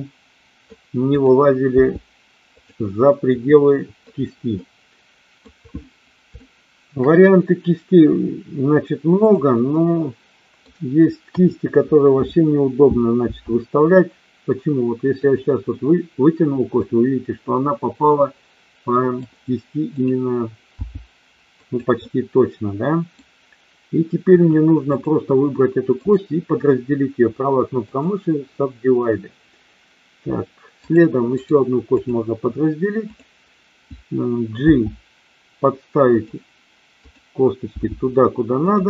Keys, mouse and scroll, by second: 1.0 click, 1.7 g, 2.5 click, 2.9-4.0 middle drag, 4.5 middle click, 6.4 shift+middle click, 9.1 click, 9.7 middle click, 11.2 KP_1, 13.1 e, 15.1 click, 15.7-16.9 middle drag, 18.1-19.2 middle drag, 19.9 click, 20.7 g, 21.6 click, 22.0-23.1 middle drag, 24.2 KP_1, 25.9-28.1 right drag, 30.7 click, 31.5 right click, 34.5 g, 36.0 click, 37.6 g, 38.6 click.